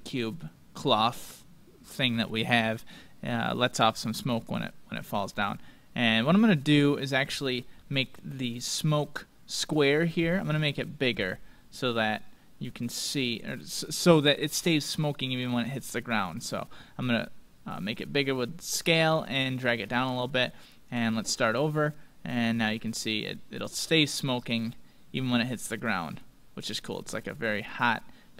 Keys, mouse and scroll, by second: 6.0-7.9 drag, 7.8-9.6 middle drag, 11.1 s, 14.1-16.0 drag, 20.8-23.5 drag.